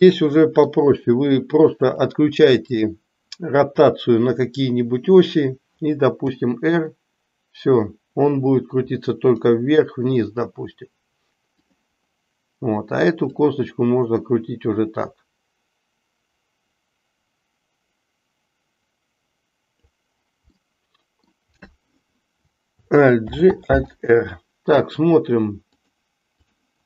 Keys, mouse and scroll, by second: 0.1 middle click, 1.9 click, 6.3 r, 13.3-19.9 drag, 20.6 middle click, 23.1 alt+g, 23.9 alt+r, 25.7-26.6 drag.